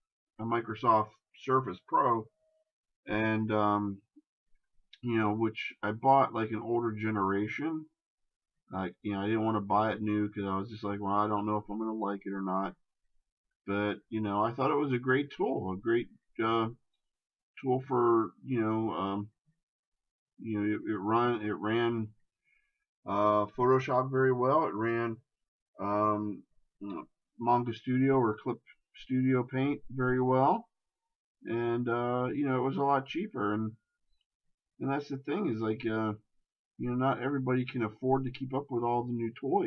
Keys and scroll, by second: 3.7 shift+space, 13.6 shift+space, 16.9 ctrl+z, 27.0 shift+space.